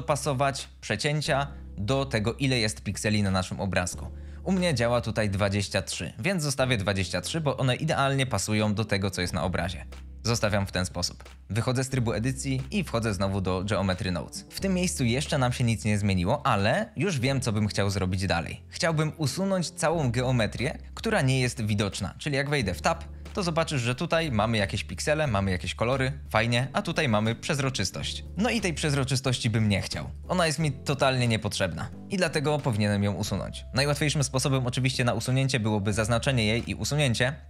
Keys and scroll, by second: 11.3 Tab, 23.0 Tab, 23.9 3, 34.7 c, 36.1 x.